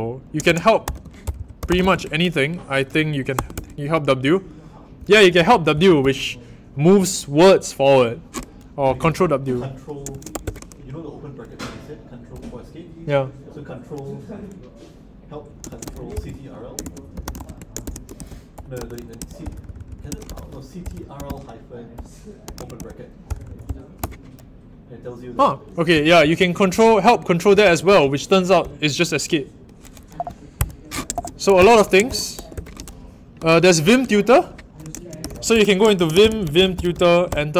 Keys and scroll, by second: 0.0-3.3 typing, 3.5 Return, 4.7-6.8 typing, 8.8 typing, 10.0-10.7 typing, 15.4-23.9 typing, 25.9-32.5 typing, 30.5 Escape, 31.5 Return, 34.9-37.5 typing.